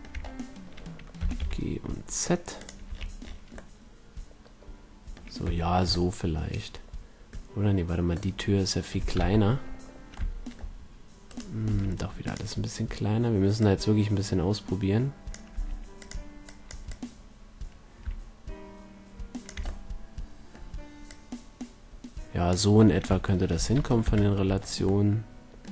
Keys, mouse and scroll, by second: 1.1 g, 2.6-5.3 drag, 2.8 a, 5.3-7.9 middle drag, 8.6-10.2 middle drag, 9.1 KP_1, 11.6 s, 12.3-15.5 drag, 15.5 s, 16.4-18.7 drag, 19.9-23.2 middle drag, 23.9 KP_5.